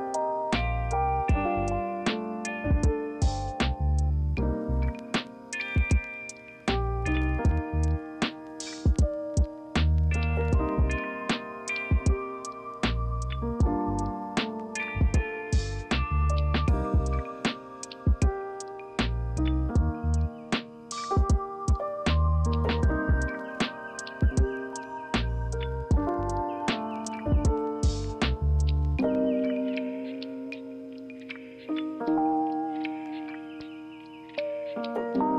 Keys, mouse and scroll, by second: 0.9 ctrl+z, 8.9 ctrl+g, 8.9 ctrl+a, 8.9 ctrl+z, 9.2 ctrl+c, 9.2 ctrl+f, 25.6 ctrl+z.